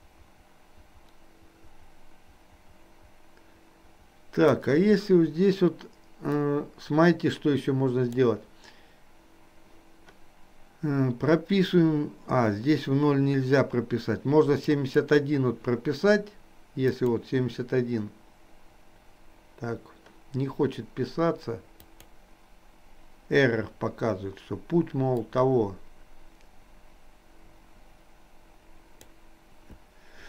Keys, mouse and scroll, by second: 6.5-8.3 drag, 14.8-15.8 drag, 17.0-18.0 drag, 22.1-23.8 drag, 25.2-29.2 drag.